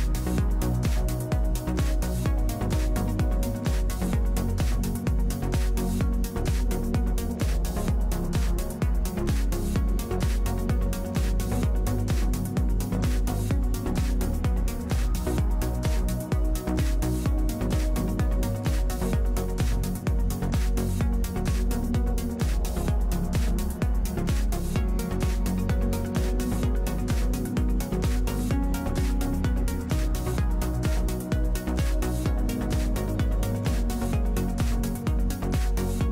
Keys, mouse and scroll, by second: 0.2-18.3 drag, 18.6-21.6 middle drag, 24.5-26.1 middle drag, 31.2 click, 32.1-35.4 middle drag, 35.4-36.1 drag.